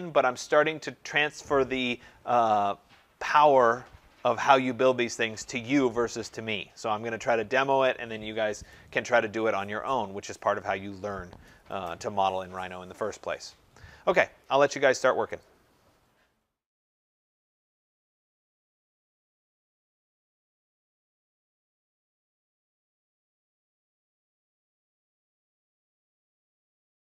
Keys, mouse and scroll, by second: 15.7 click.